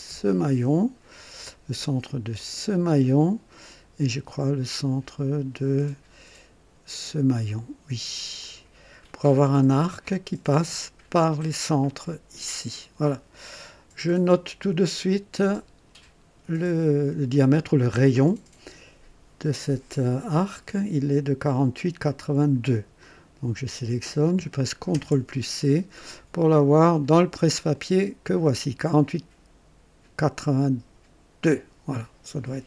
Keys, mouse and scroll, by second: 0.1 click, 2.3 click, 8.4 click, 9.4-9.8 scroll up 2, 10.0 right click, 15.4-16.0 drag, 16.9 click, 23.0 click, 24.9 ctrl+c, 27.7 click, 31.4 click.